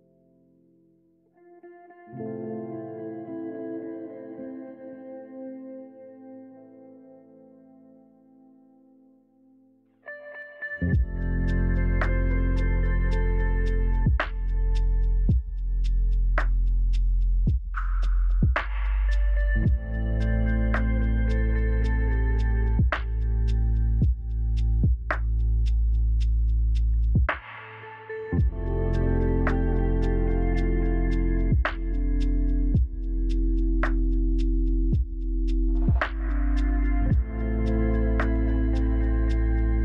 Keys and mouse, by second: 0.1 g, 0.3 z, 3.3 s, 4.8-6.5 typing, 7.7 s, 9.8 alt+z, 10.8 a, 10.9 a, 13.0 KP_1, 14.0 click, 17.9 s, 18.5 alt+z, 19.3 g, 19.3 z, 19.8 s, 20.7 s, 22.6 alt+z, 23.8 a, 23.9 shift+right click, 25.6 w, 27.7 a, 27.8 a, 28.8-29.5 drag, 31.2 Tab, 31.2-32.8 shift+drag, 33.6 Tab, 35.2 ctrl+j, 35.7-37.4 drag, 38.6-39.8 drag.